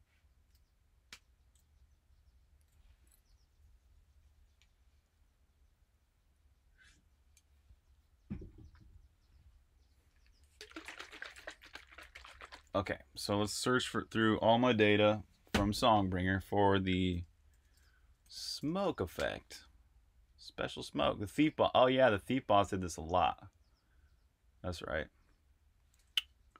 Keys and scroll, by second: 1.0 Return, 17.5 shift+super+f, 17.9-19.2 typing, 26.3 Tab.